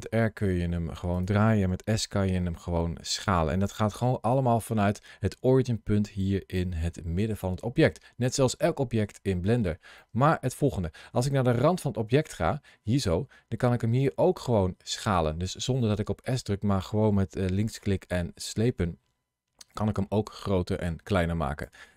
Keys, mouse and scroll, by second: 1.0 click, 1.7 s, 3.5 click, 4.0 ctrl+shift+a, 8.1 click, 9.8 middle click, 12.1 middle click, 13.9 click.